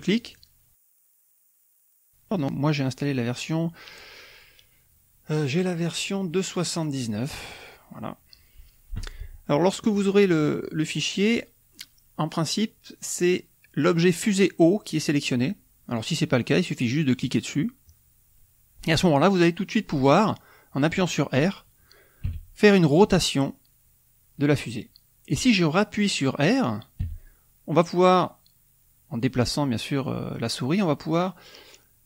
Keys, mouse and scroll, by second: 0.1-1.2 drag, 4.4 click, 5.9 click, 6.7 click, 7.6 click, 9.9 click, 10.4 click, 10.8 right click, 15.8 click, 17.1 click, 22.2 r, 26.9 r.